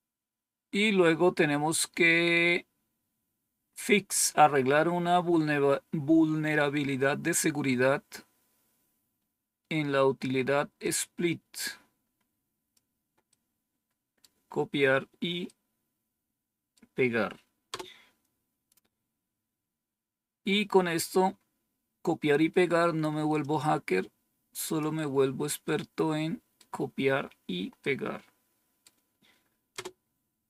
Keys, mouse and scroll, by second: 0.3-1.1 scroll down 1, 10.7-12.7 drag, 13.2 right click, 15.4-16.7 right drag, 17.6 Return, 19.4-20.2 scroll down 2, 20.2-20.8 scroll down 1, 20.8-21.5 scroll down 1, 23.3-24.7 drag, 25.6 right click, 27.7-28.8 right drag, 29.6 Return.